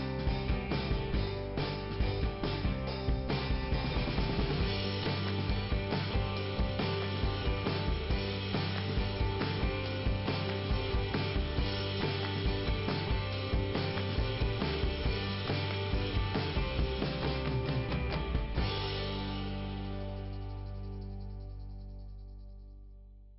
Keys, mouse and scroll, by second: 6.0 click, 9.1-9.5 scroll down 1, 18.6 scroll up 2, 20.2 click, 21.7 click, 22.2-22.9 scroll down 1.